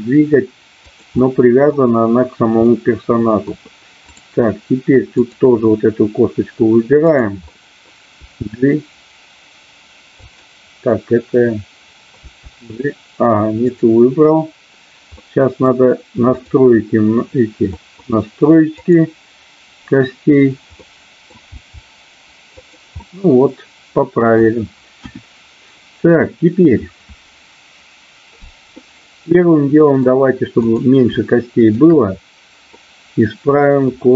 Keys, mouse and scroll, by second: 0.8 click, 1.1-1.6 scroll up 1, 2.6 middle click, 3.5-4.0 scroll down 1, 5.1-6.6 drag, 7.0 click, 7.5 middle click, 8.1 g, 10.3 click, 12.1 g, 13.6-15.0 drag, 15.1 middle click, 17.6 scroll up 1, 17.9 middle click, 18.1-18.6 scroll down 1, 18.6-20.1 drag, 20.9 middle click, 21.4 g, 22.5 click, 23.0-24.4 middle drag, 24.9 KP_1, 28.8-30.0 middle drag, 30.6-32.3 drag, 32.9-33.9 middle drag.